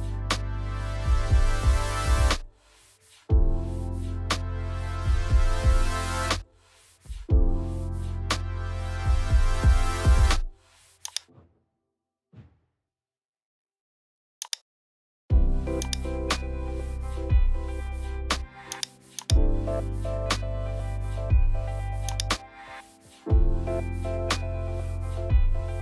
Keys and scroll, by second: 17.7 super+g, 20.4 super+t.